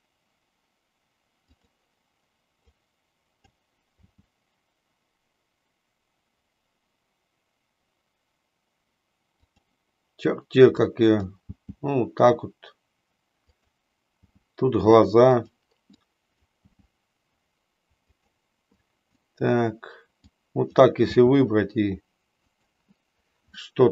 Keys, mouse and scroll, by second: 2.7 click, 4.1 g, 10.8 click, 11.6 g, 13.6 click, 14.3 g, 16.0 click, 19.0 click, 20.4 click, 21.2 g, 22.6 click, 23.7-23.9 middle drag.